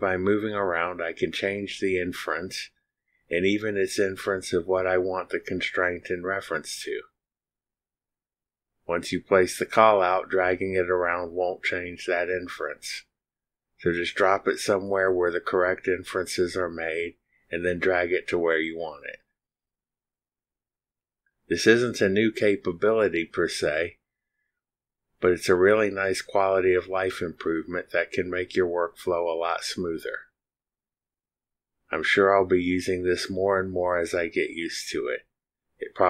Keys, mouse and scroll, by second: 0.0 click, 3.6 click, 12.1 click, 32.9 click, 34.7 click.